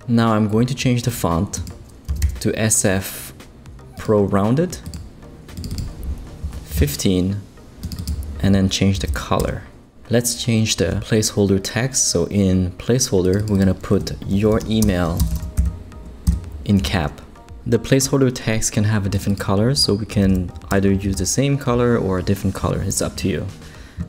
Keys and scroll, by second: 1.8-2.7 typing, 6.4 Down, 9.0 super+v, 9.4 super+Return, 14.1-16.0 typing, 16.2 shift+Return, 20.2 super+v, 20.7 super+Return, 21.3 Return, 22.0 typing.